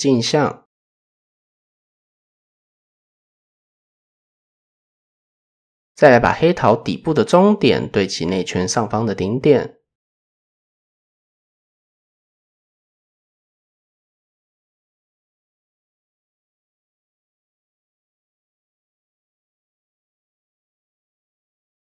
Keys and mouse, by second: 0.5 click, 1.7 Tab, 3.0 KP_1, 4.2 shift+middle click, 4.6 middle drag, 4.7 typing, 5.5 alt+click, 6.3-7.2 drag, 12.0 g, 15.0-15.8 drag, 17.3 shift+drag, 19.5 g, 21.7 click.